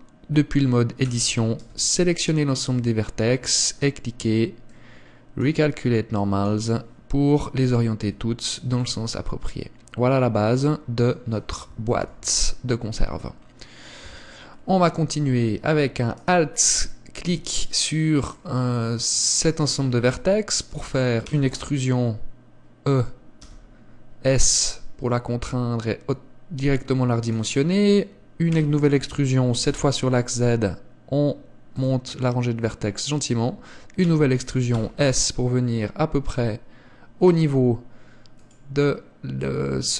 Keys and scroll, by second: 1.1 a, 8.1 Tab, 12.0 KP_1, 14.1 Tab, 28.6 e, 34.1 e.